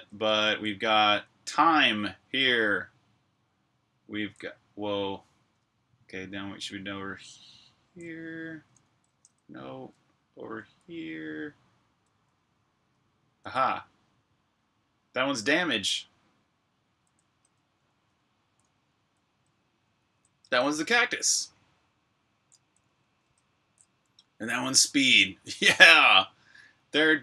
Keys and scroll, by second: 0.0-0.3 typing, 2.1-4.1 typing, 5.1-10.6 typing, 11.8 h, 13.2 h, 15.4-16.7 typing, 20.0-23.5 typing, 24.7-27.2 typing.